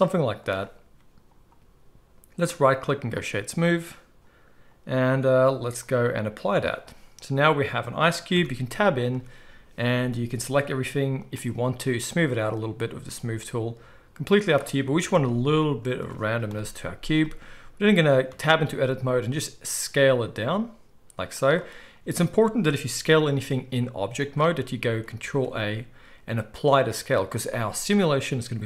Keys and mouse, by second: 2.4-7.9 middle drag, 2.4-7.9 right drag, 8.3 Tab, 9.1 a, 11.2 click, 11.2 middle click, 11.2 right click, 11.4 click, 11.4 middle click, 11.4 right click, 15.0 Tab, 16.4 KP_1, 18.2 Tab, 18.9 s, 21.2 click, 21.2 middle click, 21.2-24.2 right drag, 21.9 Tab, 23.2 s, 24.2-25.3 middle drag, 25.2 ctrl+a.